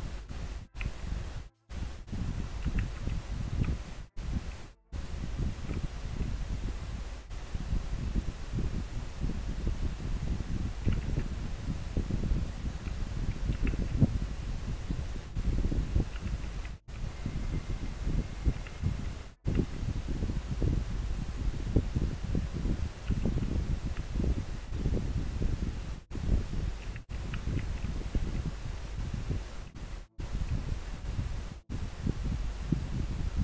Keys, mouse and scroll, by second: 0.0 scroll up 1, 3.1 scroll down 1, 4.8 scroll up 1, 5.5 scroll down 1, 16.6 scroll down 1, 17.9 scroll up 1, 27.6 scroll down 1, 28.5 scroll up 1.